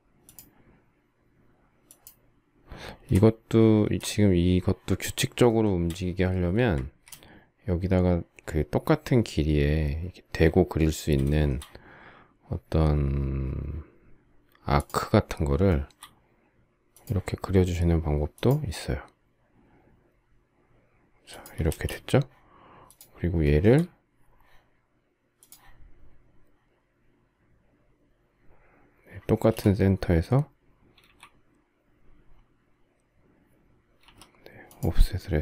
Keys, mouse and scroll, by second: 2.8 space, 5.2 shift+middle click, 6.0 space, 6.4 Escape, 11.0 shift+middle click, 15.4 shift+middle click, 21.3 space, 23.1 shift+middle click, 29.1 space, 30.7 a, 33.7 f.